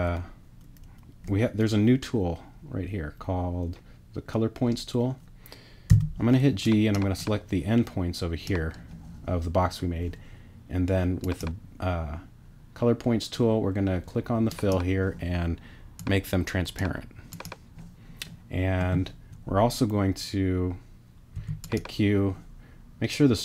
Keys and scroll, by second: 5.9 g, 21.3 p.